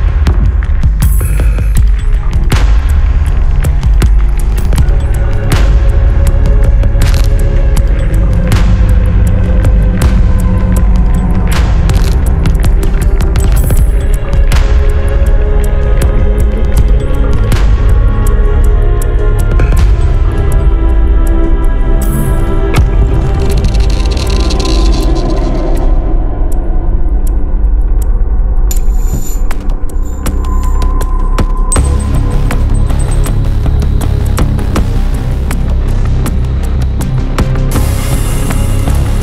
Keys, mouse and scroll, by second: 1.5-1.9 scroll down 4, 2.7 scroll up 2, 4.5 click, 6.2 scroll up 2, 6.7 click, 7.7 1, 8.3 2, 8.7 3, 9.5 scroll down 2, 10.0 scroll up 2, 12.2 click, 12.7 right click, 13.5 click, 14.6-14.9 scroll up 2, 15.7 click, 17.5-18.7 drag, 19.5 1, 20.3-25.6 drag, 26.3 click, 26.7 click, 27.3-27.6 scroll down 2, 27.7 click, 28.6-28.9 scroll down 2, 29.5 scroll up 2, 31.0 click, 32.5 click, 35.6 click, 36.8 click, 37.6 click, 38.5 click.